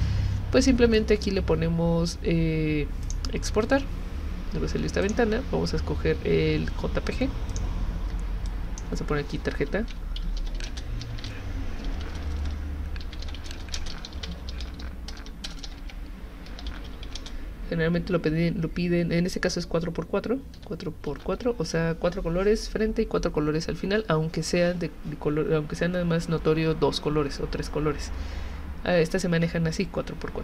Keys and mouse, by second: 3.0 click, 5.0 click, 7.5 click, 8.5 click, 9.3-17.5 typing, 20.6-21.9 typing.